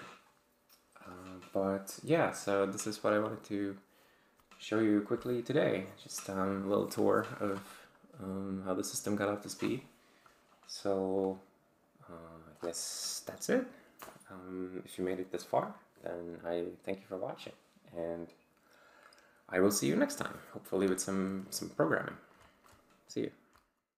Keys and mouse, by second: 11.2 click.